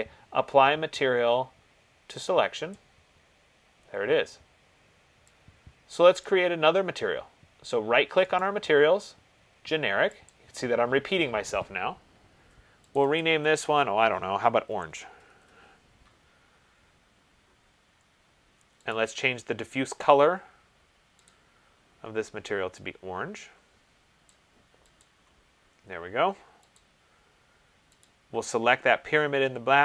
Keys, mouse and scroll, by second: 2.9 click, 6.4 click, 8.7 right click, 10.6 click, 13.2 click, 13.4 click, 14.4 ctrl+a, 15.0-15.7 typing, 19.2 click, 21.5 click, 25.2 click, 27.0 click, 28.2 click.